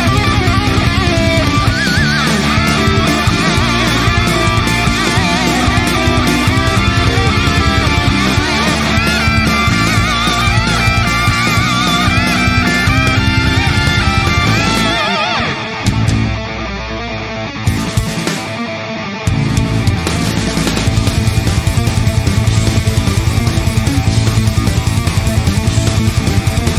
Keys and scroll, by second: 3.3 ctrl+e, 3.3 ctrl+r, 12.2 ctrl+t, 25.5 Return.